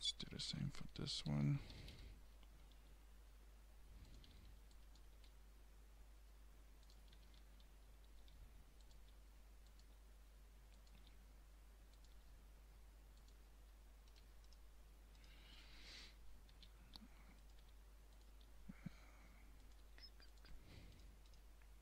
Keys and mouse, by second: 0.4 a, 0.7 a, 1.0 a, 1.4 r, 2.8 g, 4.3 a, 5.2 g, 7.2-9.9 typing, 11.3 s, 12.2 g, 15.9-18.4 typing, 19.9 g.